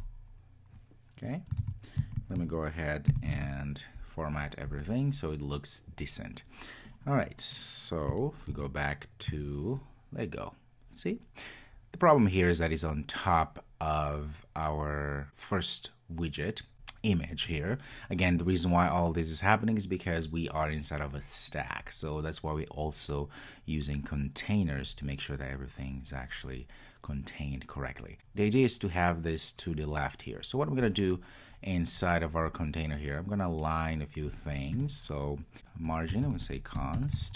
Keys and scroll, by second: 1.7 super+s, 3.1 ctrl+alt+shift+super+l, 35.6 Return.